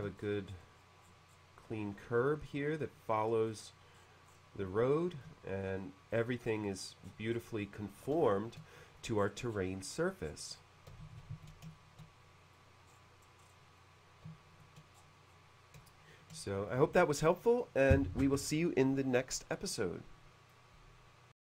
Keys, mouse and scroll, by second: 0.2-1.6 scroll down 2, 1.7 middle click, 3.9-4.2 scroll up 2, 4.7 shift+middle click, 6.2-7.1 scroll down 2, 7.3-7.6 scroll down 1, 8.2 shift+middle click, 9.2-9.8 scroll down 2, 10.3-10.9 scroll down 2, 11.2 shift+c, 11.5 shift+c, 11.7-12.5 shift+middle drag, 11.8 shift+c, 12.9-13.5 scroll up 2, 13.8 middle click, 14.9-15.6 scroll down 2, 15.8 shift+middle click, 20.6 click.